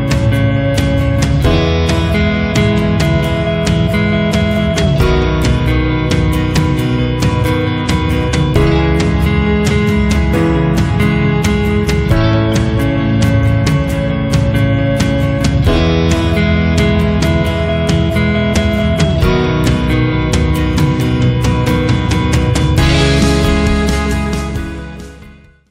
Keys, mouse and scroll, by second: 0.7 click, 2.6 click, 6.0 click, 11.7 click, 13.0 click, 15.6 click, 19.9 click, 20.6 click, 21.5 click, 24.0 click.